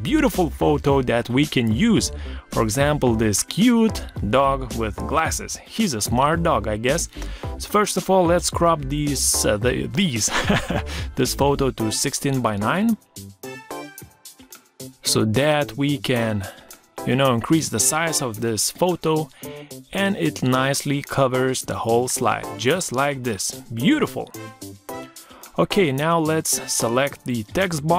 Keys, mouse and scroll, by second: 0.1 super+d, 11.3 shift+click, 19.7 shift+click.